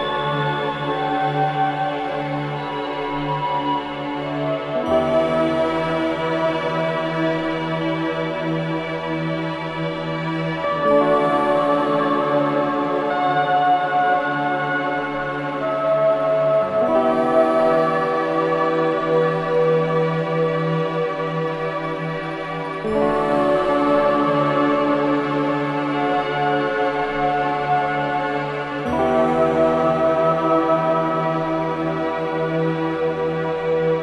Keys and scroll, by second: 14.9 ], 15.4 ], 24.9 5, 27.8 2, 30.1 4.